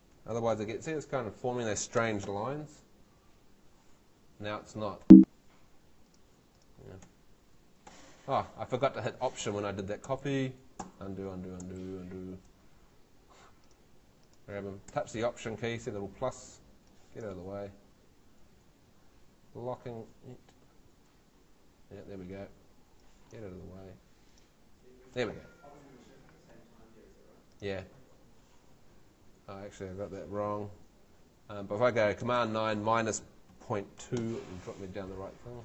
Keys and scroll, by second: 0.0-2.7 typing, 5.0 Escape, 7.0 Home, 9.7 super+z, 12.9 super+Home, 13.5 Home, 26.5 Escape, 32.4 super+9, 33.5-34.5 typing.